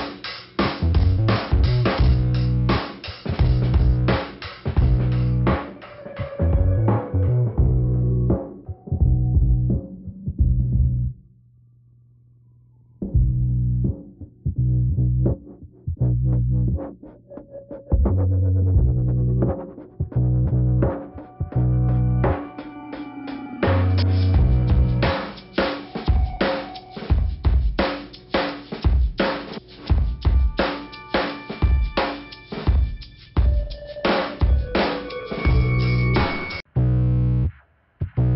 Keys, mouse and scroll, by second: 0.1 click, 0.7 click, 1.5 middle click, 3.6 click, 4.1 middle click, 6.5 click, 7.1 click, 7.7 click, 9.2 click, 10.1 click, 10.7 click, 11.7 scroll down 1, 13.2 middle click, 14.0 click, 16.7 middle click, 18.5 ctrl+click, 19.1 click, 20.7 click, 21.5 click, 22.6 click, 23.9 click, 25.4 click, 26.3 right click, 27.0 click, 27.1 click, 28.0 click, 28.8 click, 29.3 click, 29.4 click, 30.0 ,, 30.8 click, 31.5-32.3 scroll up 2, 32.3 click, 33.3 middle click, 34.2-34.6 scroll down 2, 34.6 click, 34.7 scroll down 1, 34.8 click, 36.5 click, 37.3 click, 37.9 click.